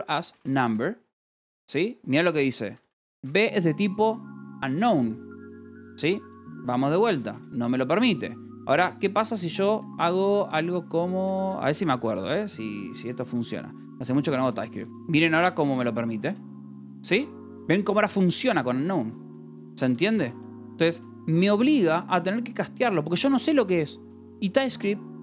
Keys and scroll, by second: 0.0-1.5 typing, 3.0 l, 3.7 h, 6.4-21.3 typing, 9.2 Escape, 13.9 Escape, 21.4 Escape.